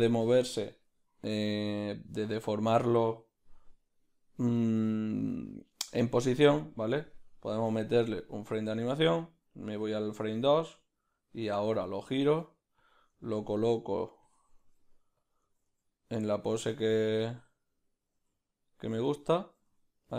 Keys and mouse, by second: 9.8 Right, 11.6 r.